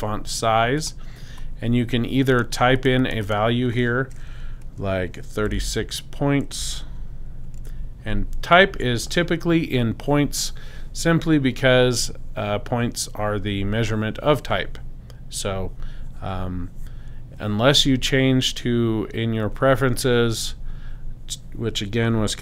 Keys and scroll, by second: 5.4-7.6 typing, 9.1 Tab.